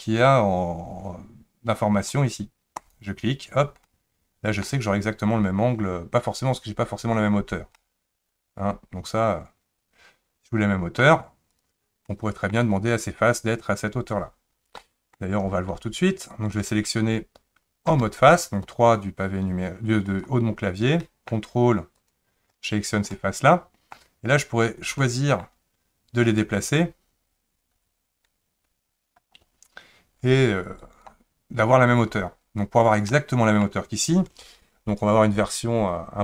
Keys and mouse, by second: 3.9-4.6 middle drag, 7.8-11.0 middle drag, 12.1-12.5 middle drag, 14.8 middle click, 17.9 3, 20.1 click, 21.0 middle click, 22.0 ctrl+click, 23.1 middle click, 25.0 middle click, 26.5-30.8 drag, 33.1 middle click.